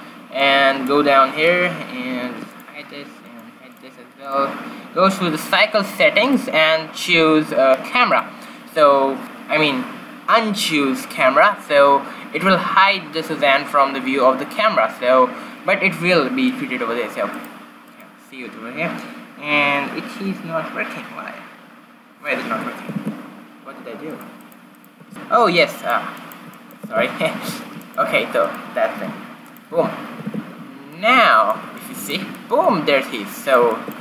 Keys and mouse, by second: 2.5-6.0 drag, 6.3-7.9 drag, 8.2-10.0 drag, 17.4-19.8 right drag, 23.1 shift+z, 24.3 click, 25.1 shift+z, 27.0 shift+z, 27.5 q, 29.1 g, 29.9 q, 30.8 shift+z.